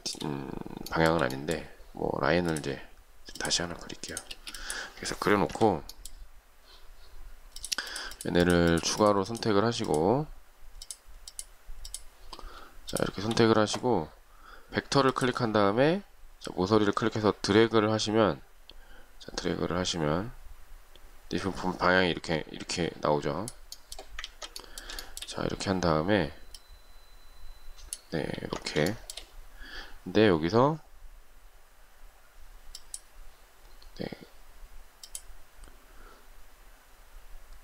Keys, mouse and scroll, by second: 0.1 shift+middle click, 1.1 shift+middle click, 4.5 space, 5.7 Delete, 8.1 shift+click, 8.3 shift+click, 8.9 shift+click, 9.0 shift+double click, 9.2 shift+click, 9.5 shift+click, 9.6 shift+double click, 9.9 shift+click, 11.0 shift+click, 11.5 shift+click, 12.0 shift+click, 13.1 shift+click, 24.5 ctrl+z, 25.2 shift+middle click, 28.5 ctrl+z, 29.1 shift+middle click.